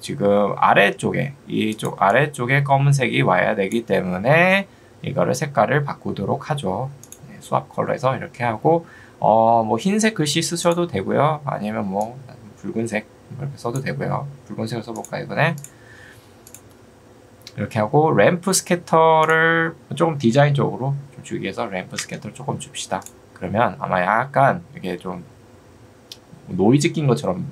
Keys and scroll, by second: 4.4 Escape, 21.6 2, 22.0 Return.